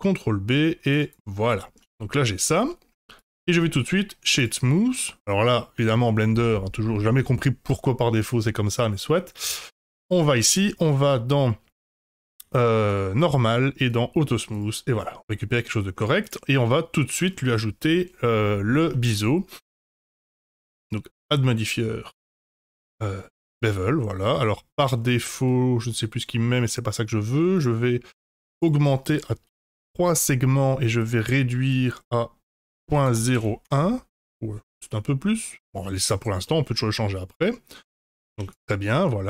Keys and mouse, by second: 1.4 middle click, 1.8 Tab, 2.1-2.8 middle drag, 3.3-4.4 right drag, 4.7 middle drag, 9.4 click, 12.5 click, 13.8 click, 14.5 click, 14.9-15.9 middle drag, 16.5-17.2 middle drag, 18.9 middle click, 19.7 click, 20.5-23.2 drag, 23.8-24.7 middle drag, 25.4-26.3 middle drag, 27.5 click, 28.7-30.3 drag, 31.1-34.6 drag, 36.4-37.7 middle drag, 37.9 Tab, 38.3 Tab, 38.8-39.2 middle drag.